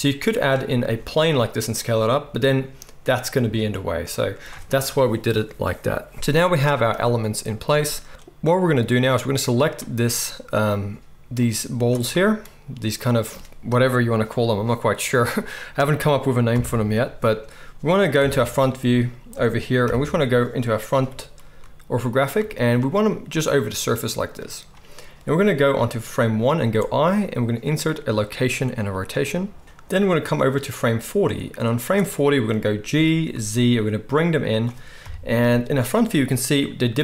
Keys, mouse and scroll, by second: 0.4 middle drag, 0.8 s, 2.1 middle drag, 3.4 x, 4.1-7.5 middle drag, 7.8-9.6 middle drag, 9.6 click, 9.6-11.3 middle drag, 11.3-22.2 drag, 19.8 KP_1, 20.9 g, 22.2-30.3 shift+middle drag, 30.3-34.6 drag, 32.9 g, 34.6-35.5 middle drag, 35.0 KP_1.